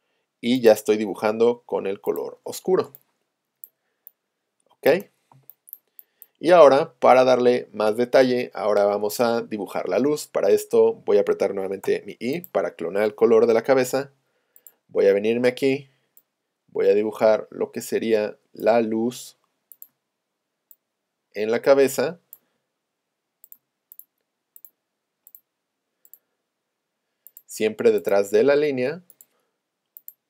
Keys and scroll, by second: 5.3 space, 7.5 space, 11.9 i, 13.5 p, 17.3 space.